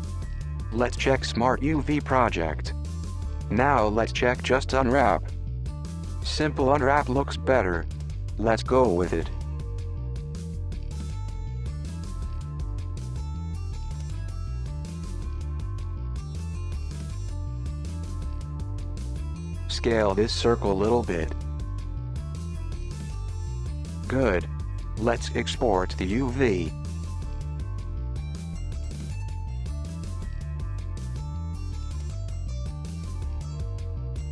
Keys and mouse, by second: 0.2 u, 3.8 u, 9.9 g, 15.6 s, 19.4 s, 24.6-27.8 drag.